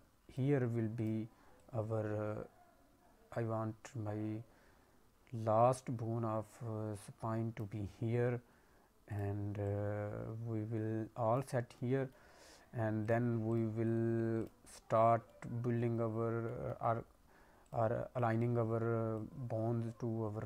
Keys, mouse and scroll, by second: 0.9 click, 1.5 click, 9.0 click, 9.6 click, 11.6 scroll down 1, 11.7 middle click, 12.3 scroll down 1, 13.0 click, 13.4 click, 15.0 scroll up 1, 15.2 middle click, 15.9 scroll down 2, 16.4 middle click, 17.6 click, 18.2 click, 19.1 click.